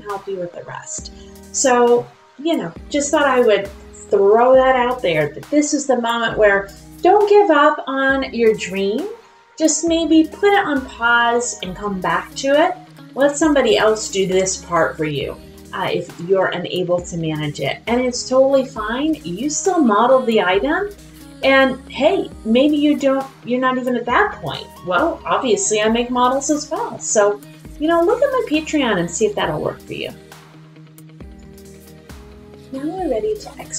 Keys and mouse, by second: 28.9 click, 31.1 click, 32.0 click.